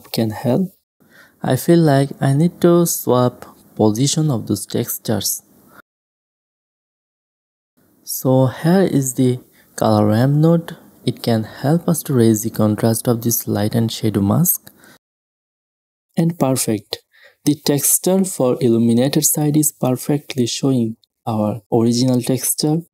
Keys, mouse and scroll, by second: 0.4-0.8 middle drag, 0.8 click, 1.2 middle click, 3.2 click, 4.4 click, 5.2 middle click, 5.8 click, 6.0 shift+a, 10.2-11.4 drag, 12.2 middle click, 12.6 click, 13.1 right click, 13.2-14.5 drag, 13.2 right click, 13.8-14.5 right drag, 14.9-15.7 drag, 16.0-17.6 drag, 18.4 middle drag, 19.9 a, 22.5 shift+space.